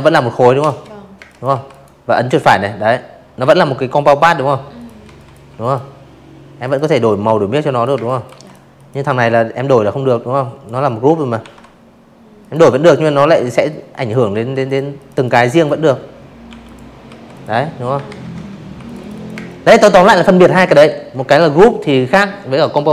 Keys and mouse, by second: 1.7 click, 1.9 z, 2.1 click, 2.4 v, 2.5 click, 3.5 click, 4.0 click, 4.8 space, 4.9 click, 5.2 v, 5.3 click, 5.6 click, 6.9 click, 8.3 ctrl+g, 9.3 click, 9.8-11.0 drag, 11.2 v, 11.6 click, 11.9 click, 12.0 click, 12.4 click, 13.4 i, 13.6 click, 14.0 v, 14.2 click, 15.0 ctrl+z, 15.7 v, 15.8 click, 15.9 click, 16.0 click, 16.3 space, 16.4 click, 16.6 v, 16.9-17.5 drag.